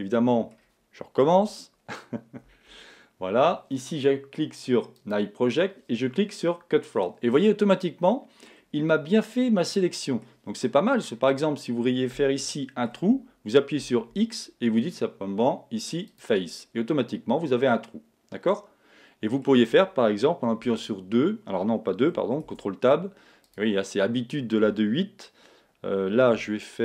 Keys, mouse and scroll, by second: 0.6-1.4 scroll up 1, 1.4-2.4 middle drag, 1.4 KP_1, 2.7 z, 5.0 click, 7.3-14.5 middle drag, 13.8 x, 16.6-18.5 middle drag, 20.6 2, 22.5 ctrl+Tab.